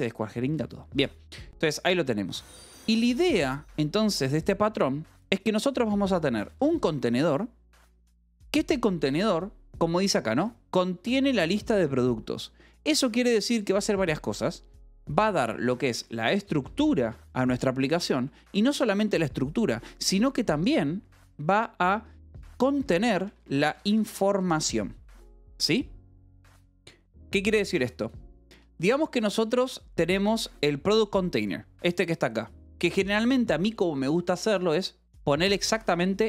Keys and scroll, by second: 0.1 Escape, 0.5 k, 0.9 j, 2.7-7.0 typing, 8.4 Escape, 8.9 l, 11.4 a, 11.7 space, 12.8 -, 13.0 space, 15.0-17.1 typing, 18.2 space, 19.0 a, 19.9 space, 21.0 :, 21.2 space, 22.6-25.0 typing, 29.2 Escape, 29.4 h, 33.1 l, 34.2-36.2 typing, 35.4 Escape.